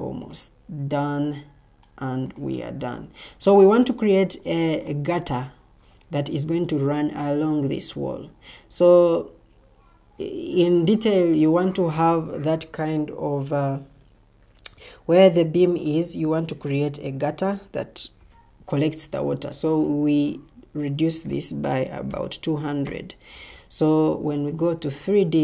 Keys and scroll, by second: 21.6-24.1 typing, 22.8 Return.